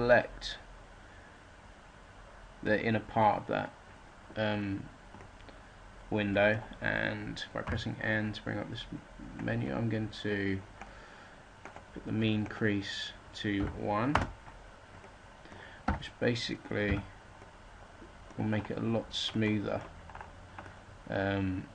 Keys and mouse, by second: 4.6-6.2 right drag, 7.6 n, 9.3-11.5 drag, 14.1 middle click, 15.0 click, 15.8 a, 16.8 z.